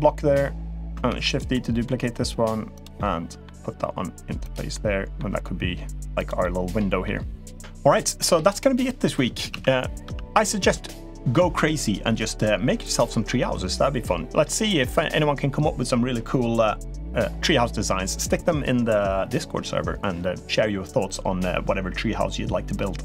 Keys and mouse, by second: 0.9 shift+d, 1.3 middle click, 1.8 g, 2.7-3.2 middle drag, 3.5 g, 4.5 middle click, 5.1 g, 6.2-6.8 middle drag, 7.0 g, 9.3 z, 9.8 z.